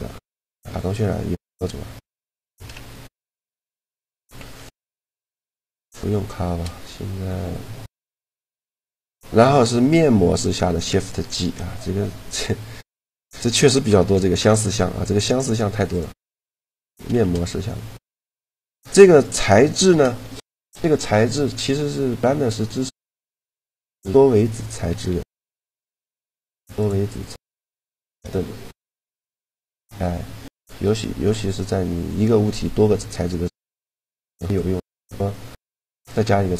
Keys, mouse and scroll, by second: 0.0 Escape, 2.4 KP_Decimal, 4.0 Tab, 4.8 a, 5.7 shift+g, 10.3-13.9 drag, 15.6-16.9 right drag, 16.4 a, 16.9 shift+g, 17.9-20.6 drag, 19.8 shift+g, 23.2 Tab, 26.6-28.4 drag, 27.4-29.0 middle drag, 29.0-30.9 drag, 30.3 middle click, 32.0 Tab, 35.3-36.5 drag, 36.2 right click.